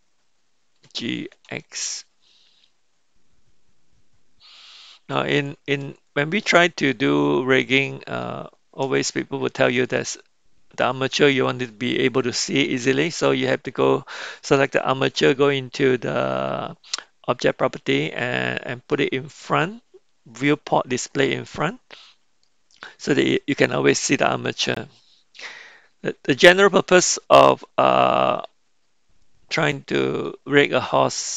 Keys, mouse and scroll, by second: 0.7 g, 6.0-7.6 middle drag, 7.7 middle click, 12.9 click, 21.3 click, 22.5-24.3 middle drag, 25.5-28.5 middle drag, 29.3 middle click.